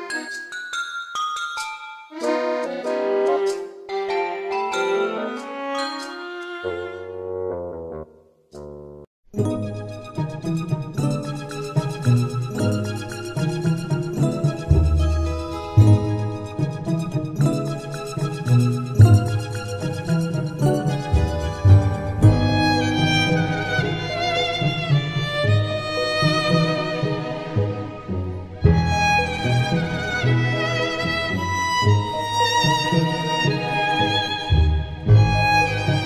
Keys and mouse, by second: 0.7 middle click, 2.9 middle click, 10.7 middle click, 12.5 right click, 22.1 middle click, 23.5 middle click, 24.1 middle click, 25.3 right click, 26.2 right click, 31.4 middle click, 33.9 right click.